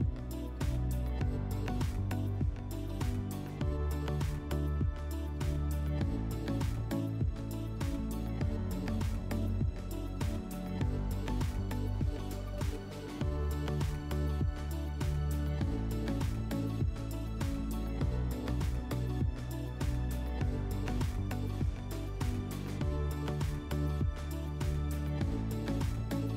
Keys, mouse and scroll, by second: 2.4-3.8 drag, 14.6 click, 20.7 click, 21.3-22.3 drag.